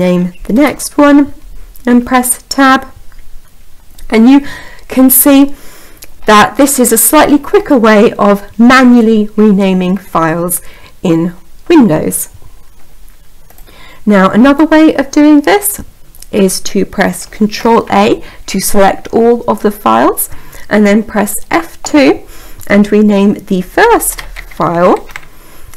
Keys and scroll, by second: 17.2 a, 21.1 F2.